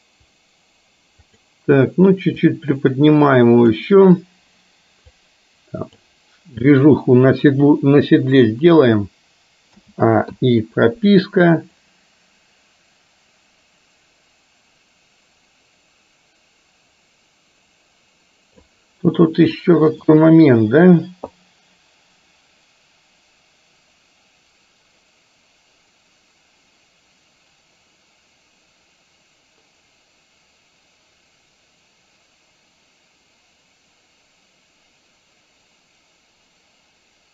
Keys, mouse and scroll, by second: 1.2 click, 2.7-3.8 drag, 5.2 click, 9.8 a, 10.3 i, 12.0-18.8 drag, 19.6-20.2 shift+middle drag, 21.5-37.3 drag.